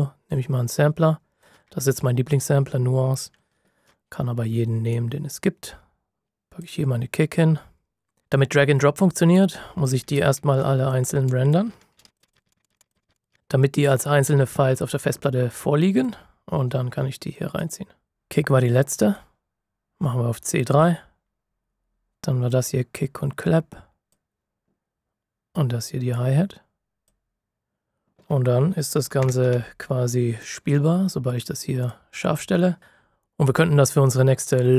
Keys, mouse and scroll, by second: 4.9 click, 9.3 click, 10.2-10.6 ctrl+scroll down 1, 10.8 click, 11.9 ctrl+shift+b, 12.1 click, 12.2 click, 12.3 ctrl+shift+b, 12.4 click, 12.5 click, 12.6 click, 12.7 click, 12.8 ctrl+shift+b, 12.9 click, 12.9 ctrl+shift+b, 13.0 click, 13.1 click, 13.3 ctrl+shift+b, 15.9 b, 19.1 F9, 19.4 click, 29.1 ctrl+alt+KP_2, 31.7 KP_2.